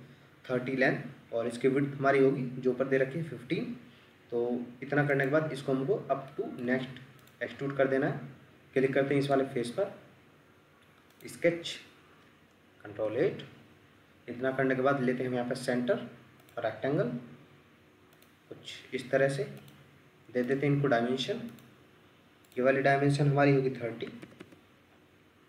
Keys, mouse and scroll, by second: 6.3 middle click, 7.4 Escape, 24.1 typing, 24.4 Return.